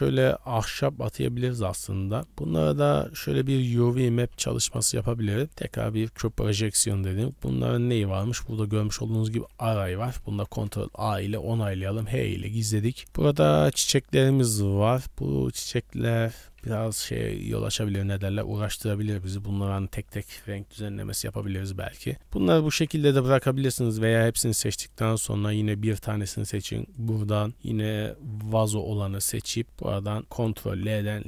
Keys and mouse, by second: 0.2-1.5 middle drag, 1.8 middle click, 2.2 Tab, 2.2 a, 2.7 Tab, 3.1 a, 3.6 Tab, 3.9 click, 4.1 g, 4.9 Tab, 5.5 u, 6.2 Tab, 7.3 click, 10.2 ctrl+a, 10.9 Tab, 11.3 Tab, 11.5 middle drag, 11.8 h, 12.4 middle drag, 13.1-14.8 middle drag, 16.6-16.9 middle drag, 17.2 b, 18.5 click, 19.3 click, 20.8 h, 21.3 b, 22.5 a, 22.7 a, 23.6 b, 24.9 shift+middle click, 26.2 click, 27.1-29.6 drag, 30.7 ctrl+l.